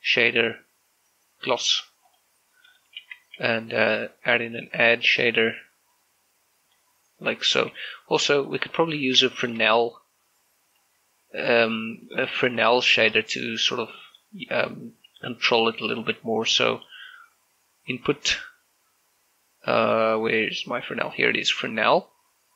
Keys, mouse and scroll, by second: 2.9 click, 3.8 shift+a, 5.3-8.3 drag, 8.3 click, 8.5 g, 8.6 click, 8.7 click, 9.2 middle click, 10.1 shift+middle click, 11.6-13.2 drag, 13.2 scroll up 2, 13.6 shift+middle click, 14.1 scroll down 1, 14.3-16.8 middle drag, 16.8 shift+a.